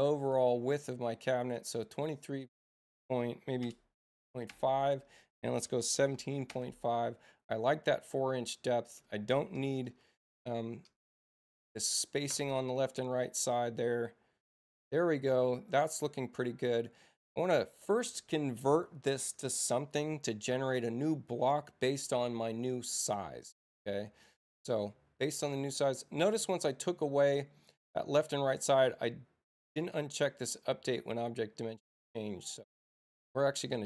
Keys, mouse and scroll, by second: 3.6 BackSpace, 4.5 Tab, 6.5 Tab, 8.8 click, 11.7 click, 13.3 click, 14.6-15.6 drag, 27.6 click, 28.2 click.